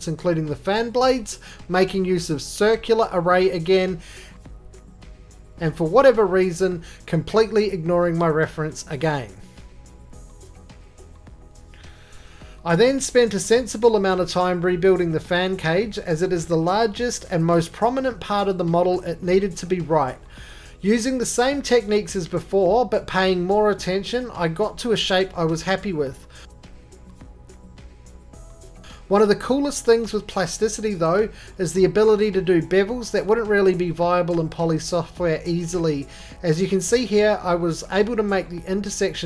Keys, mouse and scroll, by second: 1.5 scroll, 2.6-3.1 scroll, 4.5 click, 5.6 click, 6.6 right click, 7.1 scroll down 9, 7.2 middle click, 7.3 f, 8.3 click, 9.3 click.